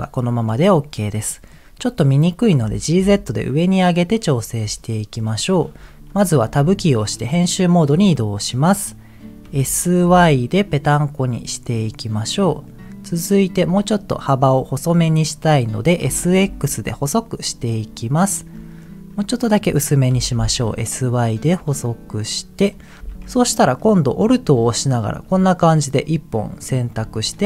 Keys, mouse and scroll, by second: 0.4-1.2 scroll down 1, 1.2 middle click, 2.7 g, 3.0 z, 4.1 click, 4.7 shift+middle click, 6.6 Tab, 8.3 middle click, 9.4 s, 10.0 y, 12.4 click, 12.6-13.6 middle drag, 16.1 s, 16.5 x, 18.3 click, 18.5 middle click, 19.1 scroll up 2, 20.1 s, 20.3 y, 22.3 click, 22.7 middle click, 23.0 a, 23.9 middle click, 24.9 alt+click, 27.2 shift+middle click.